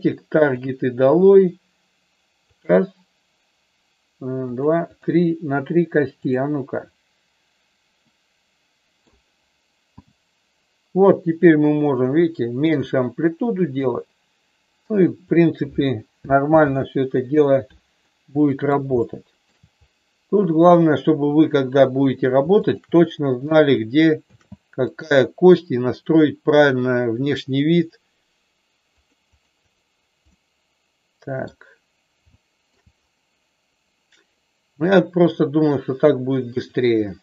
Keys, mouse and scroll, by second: 0.5 click, 1.1 click, 4.9 click, 6.1-7.6 drag, 8.0-9.1 middle drag, 9.9 g, 15.2 click, 16.5 ctrl+z, 18.0 middle click, 19.0 shift+middle click, 20.6-21.9 drag, 22.6-23.8 shift+drag, 24.2 ctrl+shift+c, 27.1 click, 29.0 click, 29.4 click, 30.2-31.5 middle drag, 32.4 shift+middle click, 36.5-37.2 drag.